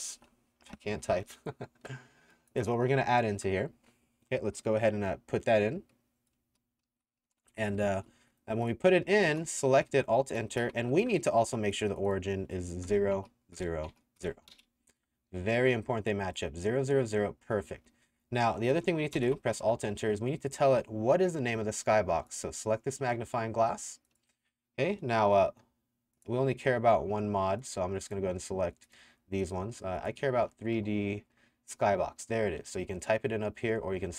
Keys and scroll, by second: 0.0-1.2 typing, 6.3-9.3 typing, 10.5 alt+KP_Enter, 12.9 KP_0, 13.2 Tab, 13.6 KP_0, 13.9 Tab, 14.2 KP_0, 14.5 KP_Enter, 17.7 w, 18.1 w, 19.2 alt+KP_Enter, 30.4 3, 30.8 d.